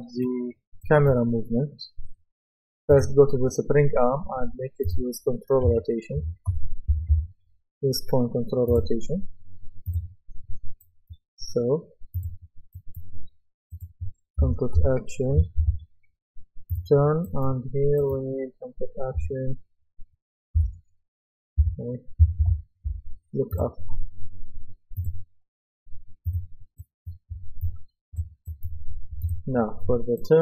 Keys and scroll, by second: 5.7-7.6 typing, 14.5-15.3 typing, 18.9-20.6 typing, 21.6 typing.